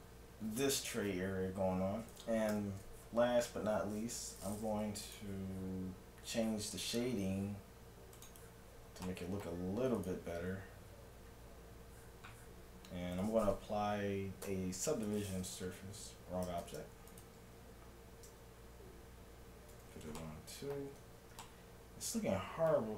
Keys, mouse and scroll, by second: 2.5 t, 5.1-6.9 drag, 8.2-9.8 drag, 9.1-10.7 middle drag, 10.0-11.8 right drag, 14.5 ctrl+1, 16.7 ctrl+0, 17.1-19.0 right drag, 18.3 ctrl+1, 19.7 ctrl+2, 20.2-22.9 middle drag.